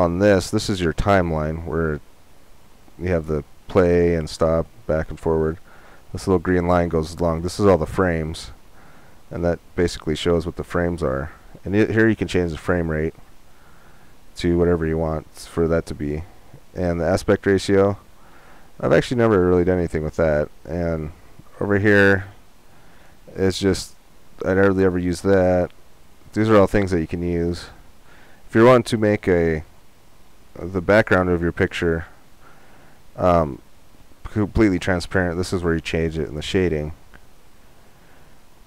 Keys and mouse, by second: 24.1-28.7 drag, 33.4-35.3 drag, 36.0-38.6 drag.